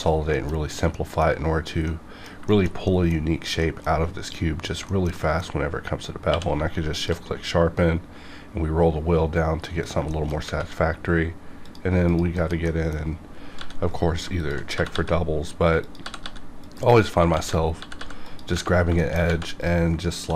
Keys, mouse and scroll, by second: 0.3 shift+middle click, 0.6 scroll down 1, 0.9 middle click, 1.6 scroll down 1, 1.9 middle click, 2.5 shift+middle click, 4.9 shift+middle click, 6.3 q, 6.9 shift+click, 7.6-7.9 scroll down 1, 9.8 click, 10.1 shift+middle click, 11.6 click, 12.3 KP_Decimal, 12.7 middle click, 13.6 g, 13.9 right click, 14.4 shift+click, 14.7 g, 14.9 g, 15.8 click, 16.0 g, 16.2 g, 16.6 click, 17.3 ctrl+z, 17.8 g, 18.0 g, 18.2 click, 18.7 scroll down 1, 19.0 shift+middle click, 19.6 click, 20.1 shift+click.